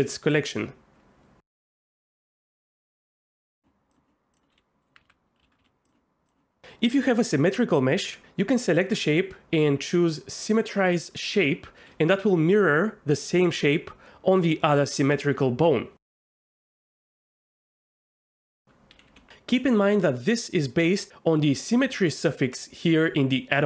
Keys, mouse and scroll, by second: 0.6 Tab, 2.9 s, 3.9 click, 5.1 alt+a, 5.4 l, 5.6 s, 16.2 ctrl+,.